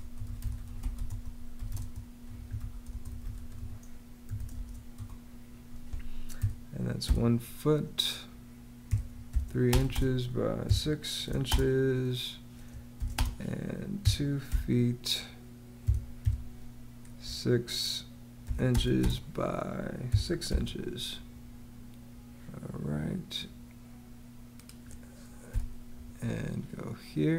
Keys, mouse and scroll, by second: 0.0-4.4 typing, 4.8 Return, 6.2 |, 6.9 ', 7.4 ', 8.5-16.8 typing, 18.3 ', 18.5 space, 18.7 x, 18.9 space, 19.9 space, 20.0 6, 25.3 -.